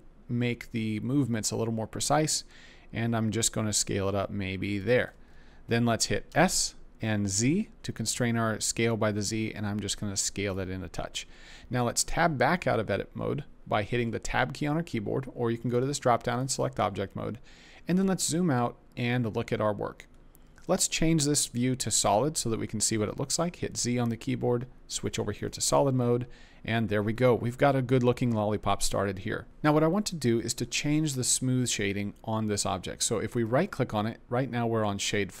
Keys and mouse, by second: 4.8 shift+click, 6.3 s, 7.2 z, 10.4 click, 12.1 Tab, 15.8 click, 23.5 z, 33.5-35.4 right drag.